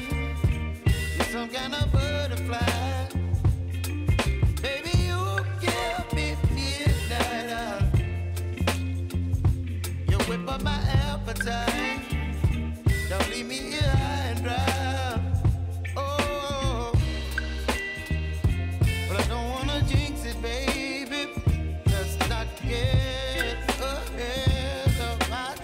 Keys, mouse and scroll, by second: 16.8 u, 18.1-25.6 drag.